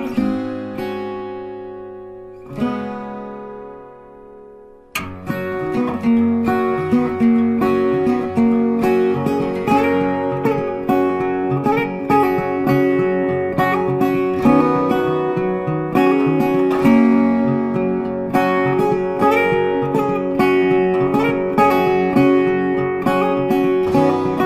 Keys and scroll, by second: 11.6 Right.